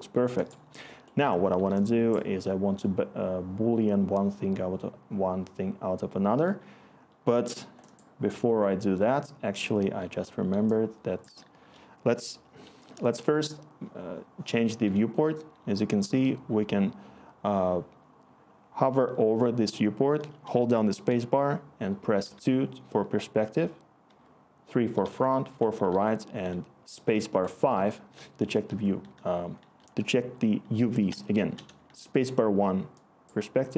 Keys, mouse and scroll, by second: 24.0-25.9 typing, 28.1-29.9 typing, 31.1-33.5 1.